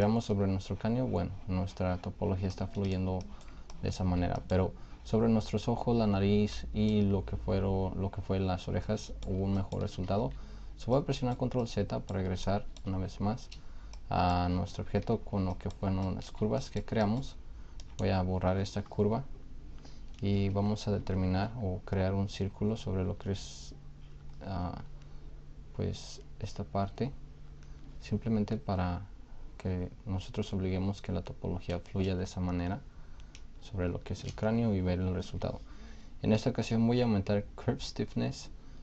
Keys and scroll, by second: 10.2 ctrl+z, 13.3 shift+d, 15.2 shift+f.